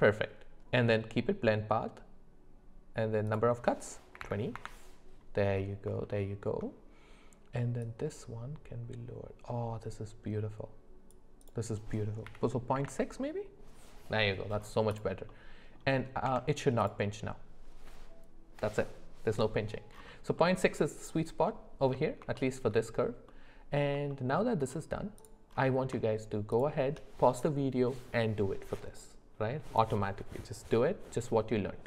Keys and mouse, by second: 3.3-4.6 drag, 6.0 shift+middle click, 7.9-11.1 drag, 11.5-12.9 drag, 15.3 middle click, 16.2 Tab, 20.4 middle drag, 22.3 shift+middle click, 23.3 middle click, 24.1 shift+middle click, 26.5 shift+click.